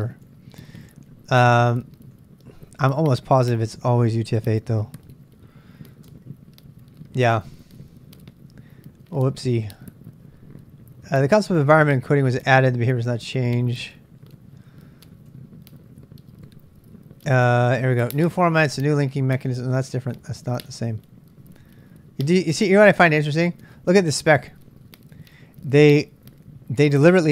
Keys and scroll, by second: 2.9-6.6 typing, 18.5-20.1 typing, 22.3-23.0 typing.